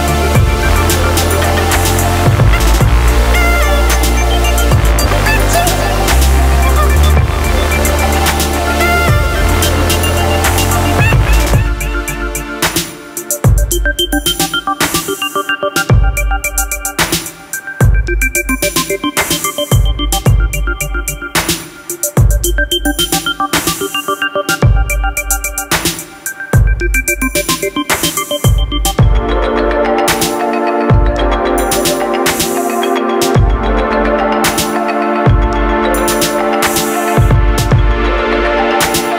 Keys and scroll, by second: 30.5 Delete, 35.8 ctrl+d.